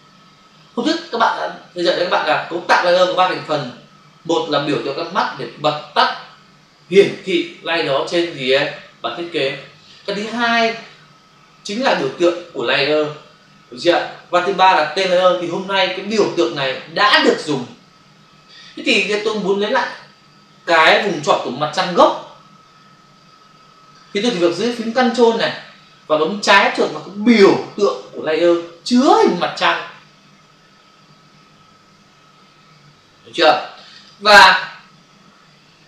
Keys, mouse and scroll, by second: 33.9 click.